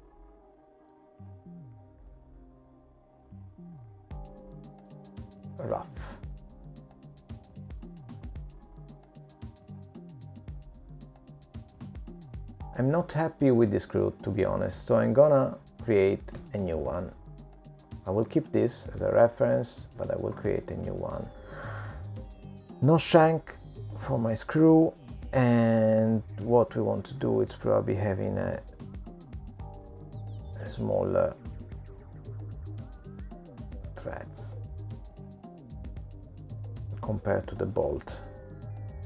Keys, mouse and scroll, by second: 2.6 middle click, 3.6-4.1 scroll down 4, 4.1 middle click, 8.9-9.7 scroll up 2, 9.7 middle click, 15.8 middle click, 17.2 click, 17.9 middle click, 19.6 g, 21.3 Delete, 21.3 click, 26.7 click, 30.6 click, 33.9 click, 37.5 click.